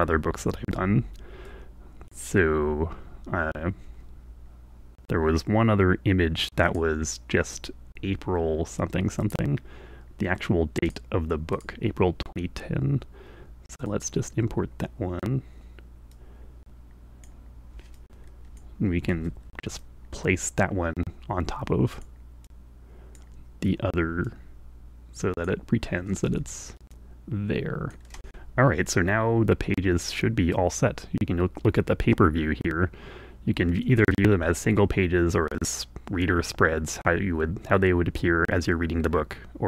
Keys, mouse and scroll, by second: 1.4 click, 6.6 click, 9.1 click, 10.8 click, 11.5 click, 13.8 click, 16.1-17.4 drag, 17.9 click, 19.1 ., 19.8-22.2 drag, 22.4 click, 24.2-25.5 drag, 26.8-28.1 drag, 33.6 click, 35.6-36.9 drag.